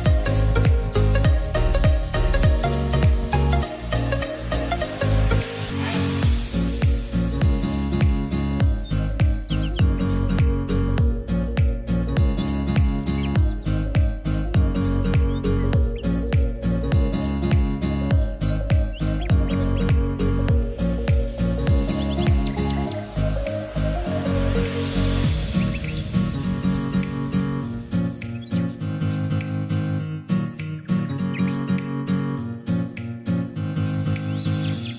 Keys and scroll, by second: 2.8-3.8 typing, 13.0-14.6 typing, 21.6 ctrl+z.